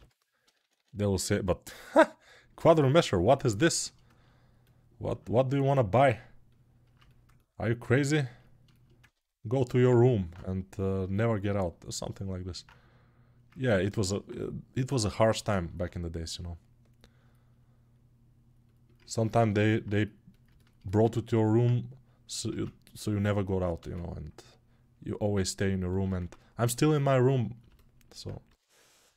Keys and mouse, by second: 0.7 ], 4.9-7.7 right drag, 7.7-22.4 ctrl+alt+drag, 22.4 ctrl+Tab, 23.6 shift+a, 26.0 Tab.